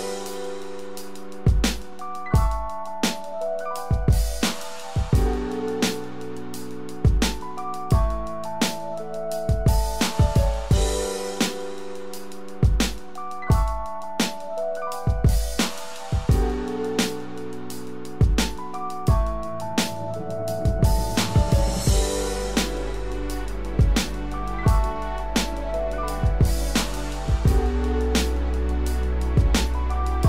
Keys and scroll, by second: 18.3 ctrl+z, 22.3 ctrl+Return, 26.1 ctrl+d.